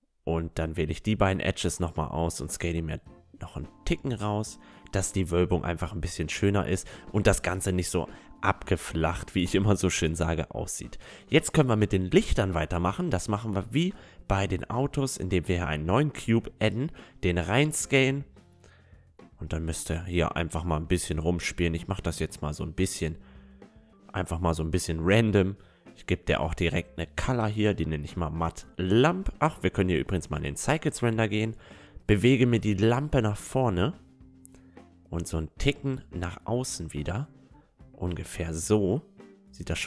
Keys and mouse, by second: 0.7 middle click, 1.0 Tab, 1.4 right click, 3.4 s, 4.0 right click, 4.5 middle click, 5.5 Tab, 5.6-7.2 middle drag, 8.6 middle click, 8.8-13.2 middle drag, 13.3-14.9 drag, 14.5 s, 16.7-18.4 drag, 17.5 middle click, 18.6 s, 21.6 s, 24.0 s, 26.4-29.6 drag, 31.0-32.8 drag, 32.3-34.6 middle drag, 33.7-39.8 drag, 39.2 middle click.